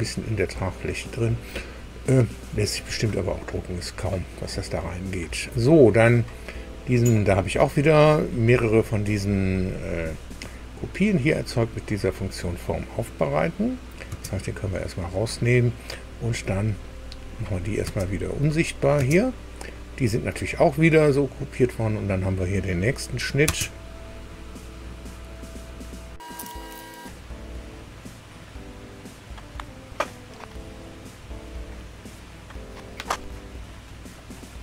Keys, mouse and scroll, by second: 0.3 scroll down 1, 14.1 space, 17.4 click, 17.8 space, 18.6 click, 19.0 space, 22.8 click, 23.4 space, 25.7 click, 29.6 alt+Tab, 29.7 alt+Tab.